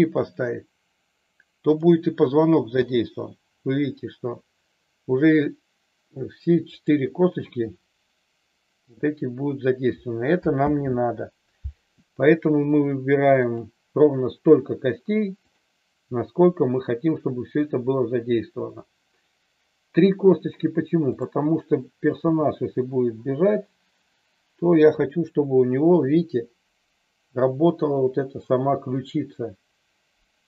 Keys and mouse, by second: 1.7 click, 2.7 g, 6.6 click, 10.6 ctrl+z, 13.5 click, 15.5 click, 22.1 g.